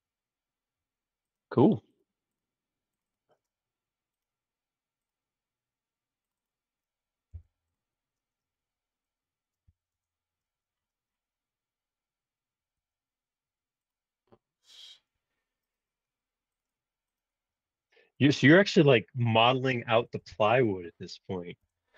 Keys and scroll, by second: 7.3 p, 9.4-10.4 typing, 19.7-20.8 typing, 21.6 Return.